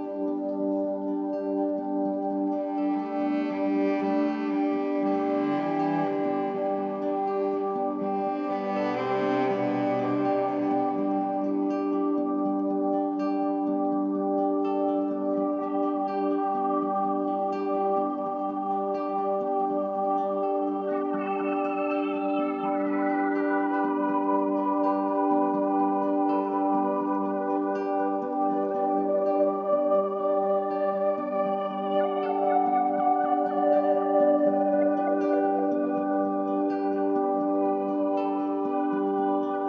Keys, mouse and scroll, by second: 0.4 shift+Right, 0.6 shift+Right, 0.8 typing, 1.8 click, 3.2 click, 5.3 shift+Right, 5.5 typing, 6.2 shift+Right, 8.3 shift+Left, 9.4 shift+click, 10.6 click, 11.1 shift+click, 12.0 shift+Right, 12.3 shift+Right, 12.4 typing, 14.0 Down, 14.3 Down, 15.3 click, 16.7 ctrl+shift+Right, 18.2-21.4 drag, 23.1 ctrl+g, 24.3 click, 25.7 click, 28.0 ctrl+shift+g, 29.3-39.6 drag.